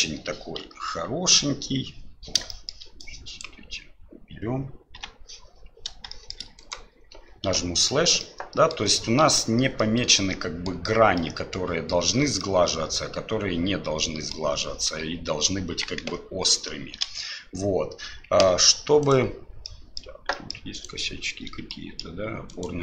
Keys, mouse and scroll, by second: 0.6 KP_Divide, 2.5 shift+middle drag, 3.0-3.4 drag, 4.9 Delete, 6.1 shift+middle drag, 6.6 right click, 7.5 KP_Divide, 8.2-8.7 middle drag, 9.8-10.7 middle drag, 11.2-11.5 middle drag, 12.4-14.3 middle drag, 16.0 KP_1, 17.0 KP_Divide, 19.0 right click, 19.6-20.0 middle drag, 20.3 middle click, 20.7 right click, 21.7 shift+middle click, 22.5 shift+right click.